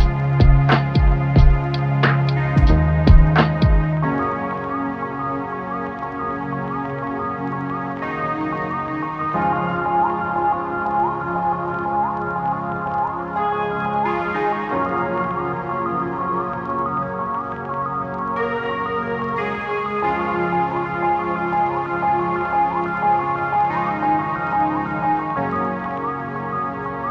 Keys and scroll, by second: 3.7 8, 9.6 Tab, 11.6 Tab, 14.1 Tab, 16.8 ctrl+z, 26.4 ctrl+z.